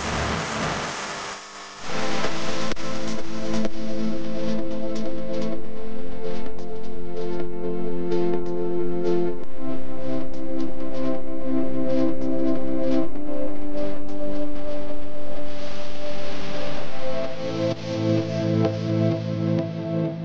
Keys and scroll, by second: 0.4-3.8 typing, 7.7 u, 9.1 a, 14.0 r, 18.6-20.0 typing.